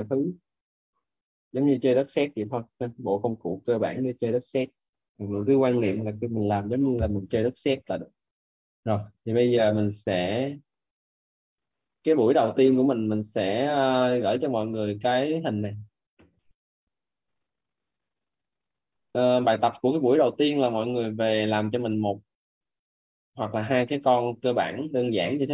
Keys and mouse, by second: 8.9 Escape, 11.2 click, 13.6 click, 22.6 click, 25.1 click.